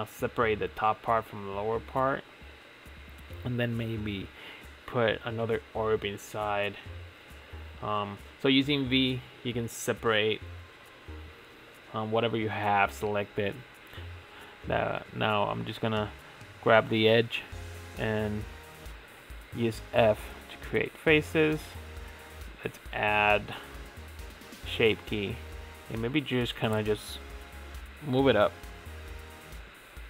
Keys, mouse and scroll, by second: 0.6 click, 1.6 l, 2.9 p, 5.0 alt+click, 6.0 v, 11.2 click, 11.7 l, 12.3 scroll down 2, 13.7-14.2 scroll up 3, 14.2 alt+click, 15.4 f, 16.6 f, 17.4 scroll down 4, 17.8 Tab, 18.5 Tab, 19.3 Tab, 20.1 click, 20.9-22.4 drag, 22.5-25.4 drag, 25.4 Tab, 26.2 click, 26.6 l, 27.3 g, 29.5-29.8 scroll up 5.